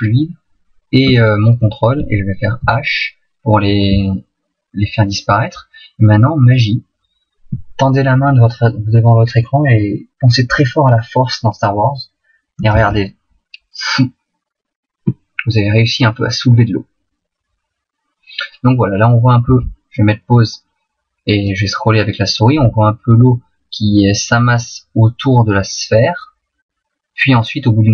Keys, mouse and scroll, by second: 1.1 shift+right click, 2.6 h, 3.7 middle click, 12.7 alt+a, 19.5 Escape, 21.5 click.